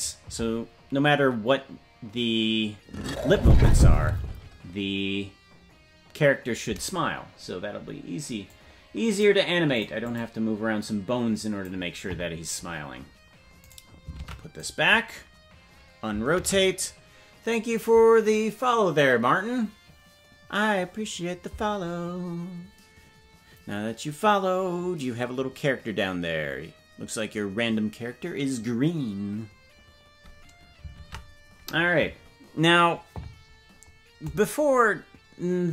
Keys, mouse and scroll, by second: 14.2 click, 14.2 right click, 14.2 ctrl+Tab, 14.9-15.9 right drag, 16.4 alt+r.